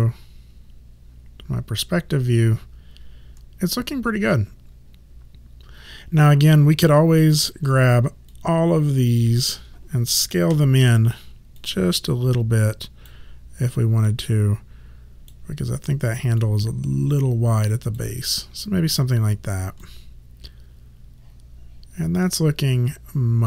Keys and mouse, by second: 8.4 click, 10.6 r, 11.7 click, 14.1 click, 16.5 click, 19.9 alt+click.